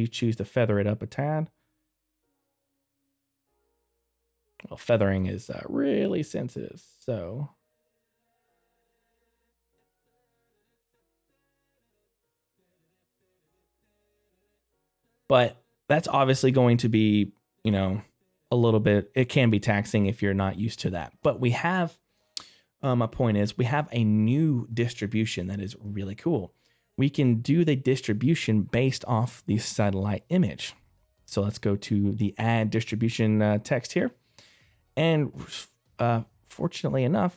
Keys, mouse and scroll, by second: 11.8 right click, 12.5 click, 14.7 middle click, 20.5 click, 25.3 middle click, 33.0 click.